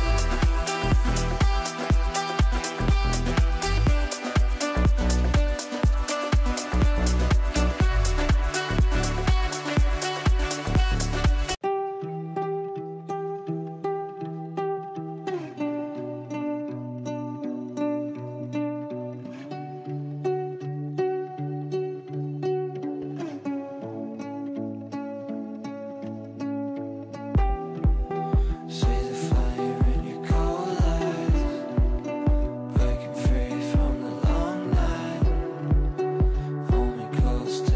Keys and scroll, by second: 8.3 Down, 8.4 Right, 8.8 Down, 9.1 Right, 9.2 Down, 9.7 Left, 13.5 Right.